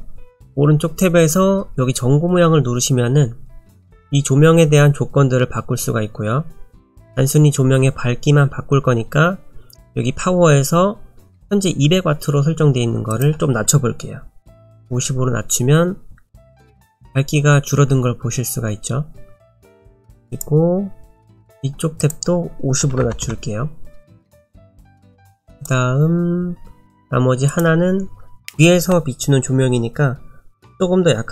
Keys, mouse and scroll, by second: 13.1 click, 20.3 click, 22.0 click, 25.5 click, 27.5 click.